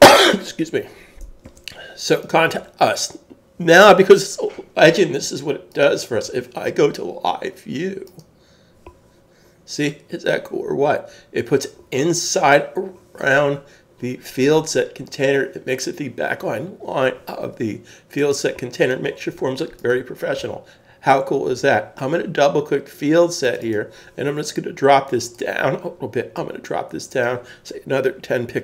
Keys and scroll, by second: 1.4 super+s.